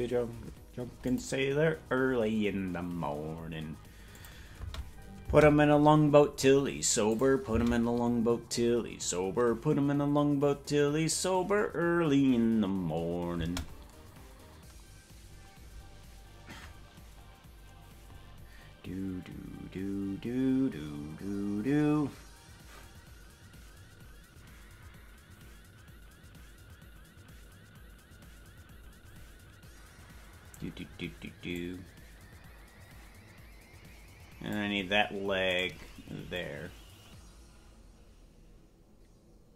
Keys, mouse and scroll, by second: 1.1 click, 4.2 click, 4.6 space, 5.3 space, 7.1 click, 7.5 space, 15.9-16.5 scroll down 5, 31.6-34.7 drag, 35.6 right click, 36.4-39.5 drag.